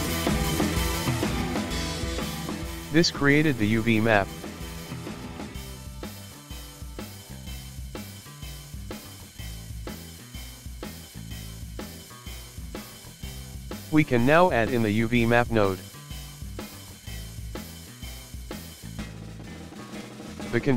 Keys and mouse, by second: 3.5 click, 3.7-6.8 drag, 9.1-12.1 drag, 14.1-20.7 ctrl+middle drag.